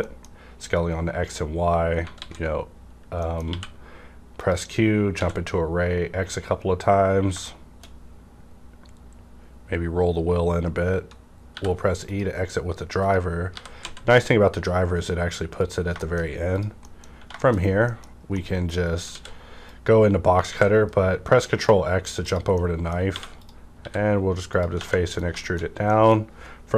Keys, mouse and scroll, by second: 2.2 alt+s, 3.1 middle click, 3.5 q, 4.4 click, 4.6 click, 5.6 x, 6.0 scroll up 1, 7.4-9.2 middle drag, 9.1 scroll down 1, 9.5-10.2 scroll up 1, 10.2-10.7 scroll up 1, 11.5 e, 12.1 click, 12.9 click, 13.4-13.7 typing, 15.5 click, 16.0 shift+middle click, 16.5 click, 16.7 middle click, 17.1 Tab, 17.1 -, 17.4 shift+middle click, 17.8 middle click, 18.1 scroll down 1, 18.6 middle click, 18.6 scroll down 1, 19.1 alt+w, 19.7-22.2 drag, 20.5 ctrl+x, 22.5 middle click, 22.7 scroll down 1, 23.0 scroll up 1, 23.1 3, 23.4 click, 23.7 e, 24.5 click, 24.7 Tab, 24.9 middle click, 25.2 scroll down 1, 25.4 middle click, 25.9 middle click.